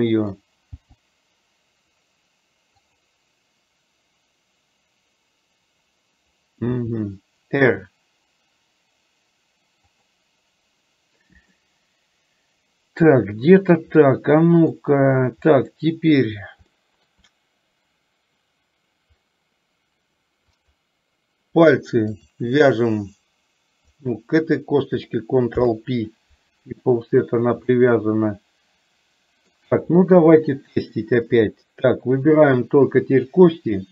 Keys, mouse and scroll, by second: 0.8 g, 6.7 r, 11.7-13.9 middle drag, 14.1 middle click, 15.6 middle click, 16.8 shift+middle click, 20.6 click, 22.2 shift+click, 25.7 ctrl+p, 27.8-29.6 middle drag, 30.3 KP_1, 31.3-33.9 drag.